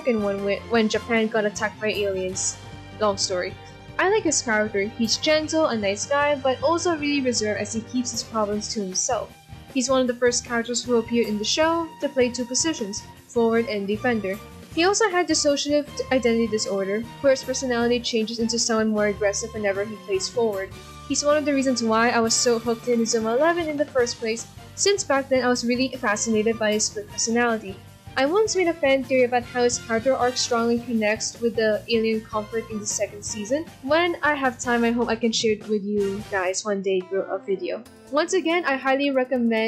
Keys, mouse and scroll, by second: 5.8 ctrl+], 5.9 ctrl+z, 6.3 ctrl+z, 8.0 ctrl+-, 8.7 ctrl+-, 10.3 b, 10.8 right click, 14.6 ctrl+-, 14.7 ctrl+=, 16.3 right click, 16.5 ctrl+z, 16.5 b, 16.5 right click, 16.8 b, 20.6 ctrl+=, 20.8 ctrl+-, 21.8 ctrl+z, 22.3 l, 22.7 b, 22.9 right click, 23.7 ctrl+z, 25.3 ctrl+-, 25.4 ctrl+=, 26.4 ctrl+=, 29.8 ctrl+-, 30.0 ctrl+=, 31.0 ctrl+-, 31.2 ctrl+=, 32.9 ctrl+-, 33.3 ctrl+=, 34.5 ctrl+-, 35.5 ctrl+-, 36.1 ctrl+=, 36.2 ctrl+-, 37.2 ctrl+=, 39.5 ctrl+-.